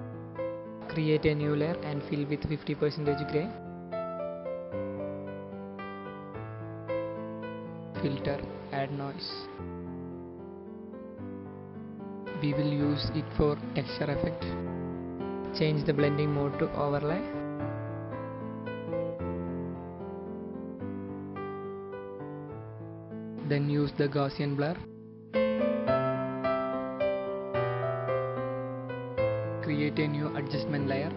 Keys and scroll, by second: 1.7 shift+F5.